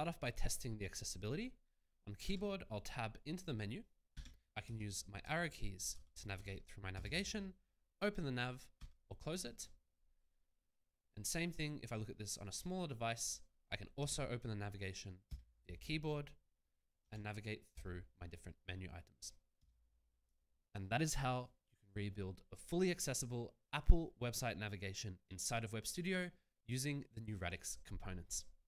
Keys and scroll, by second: 2.7 Tab, 4.7 Right, 6.9 Return, 8.8 Escape, 13.5 Tab, 15.3 Return, 17.0 Tab, 17.7 Return, 20.2 Escape.